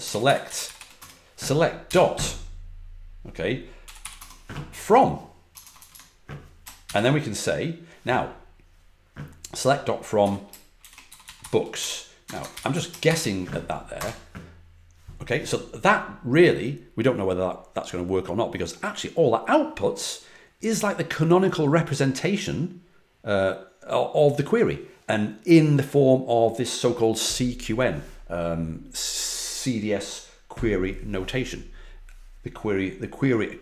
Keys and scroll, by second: 0.0-1.8 typing, 3.5-4.4 typing, 5.5-6.8 typing, 10.5-13.5 typing, 13.9 Return.